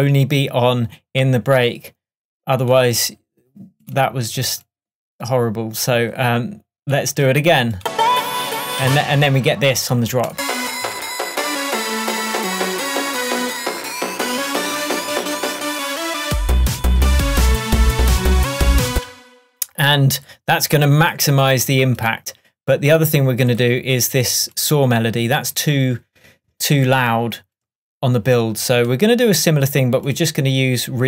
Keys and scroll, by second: 8.9 space, 19.0 space.